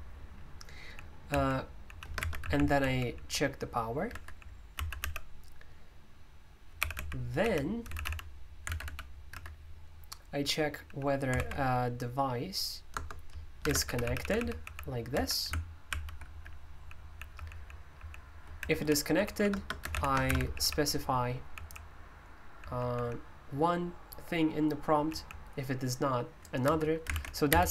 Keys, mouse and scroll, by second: 0.5-2.9 typing, 4.0-5.5 typing, 6.5-11.9 typing, 12.9 Return, 12.9-23.2 typing, 15.9 ctrl+o, 19.8 Escape, 24.8-25.1 typing, 26.4-27.7 typing.